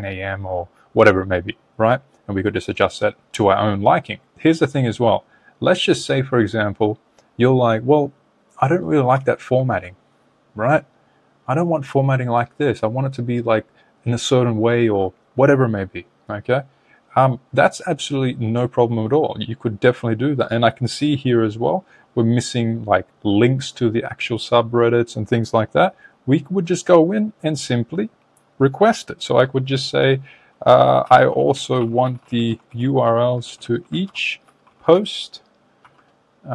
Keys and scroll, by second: 9.8 super+Tab, 32.4 shift+r.